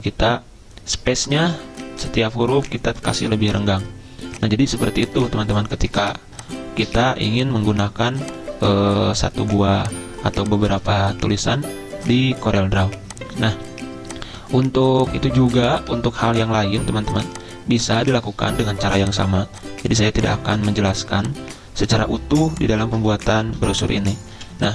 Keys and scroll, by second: 6.0 c, 10.7 a, 15.9 a, 23.6 c, 24.3 z.